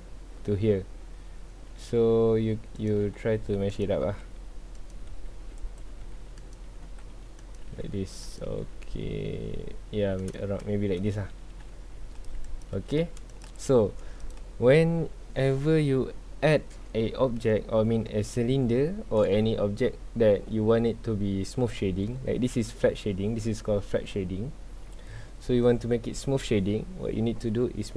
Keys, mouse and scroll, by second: 8.5 g, 10.6-10.9 shift+middle drag, 10.9 shift+scroll up 1, 11.1-11.4 scroll down 1, 11.4 g, 12.6 click, 12.8 g, 13.4 click, 13.8 scroll up 1, 14.2 click, 15.7 scroll down 1, 17.1-18.0 middle drag, 18.0 scroll down 2, 18.3-21.5 middle drag, 22.1-24.7 scroll up 2, 24.7-27.8 scroll down 2.